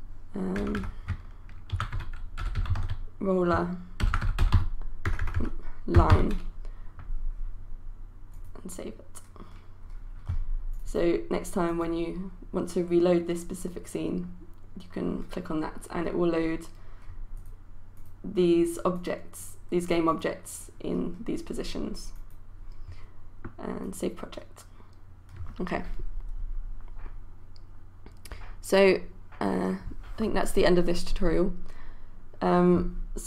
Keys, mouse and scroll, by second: 0.0-6.6 typing, 8.3 click, 18.3-24.9 drag.